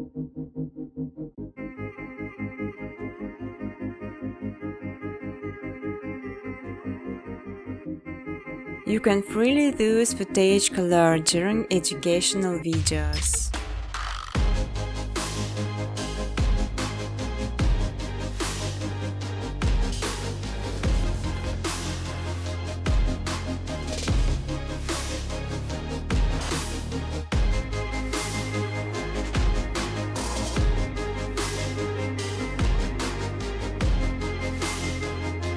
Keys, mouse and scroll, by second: 2.9 click, 3.4 click, 4.8 click, 5.3 click, 6.4 click, 6.6 click, 7.3 click, 7.8 click, 8.0 click, 8.2-8.8 typing, 9.1 click, 10.0-10.9 scroll, 11.0 ctrl+c, 11.2 ctrl+d, 11.5 click, 11.9 click, 12.4-13.5 typing, 13.6 ctrl+c, 13.9 ctrl+d, 14.3 click, 14.6-19.0 typing, 15.5 ctrl+c, 15.7 ctrl+d, 16.1 click, 17.4 ctrl+c, 17.7 ctrl+d, 18.0 click, 20.2-20.6 scroll, 20.6 click, 21.6-22.1 scroll, 22.2 click, 22.7 click, 23.2 click, 23.7 click, 24.2 click, 24.7 click, 25.2 click, 25.7 click, 26.4 click, 27.1 click, 27.4 click, 28.0 click, 28.5 click, 29.0 click, 30.1 click, 32.2 click, 33.2 click.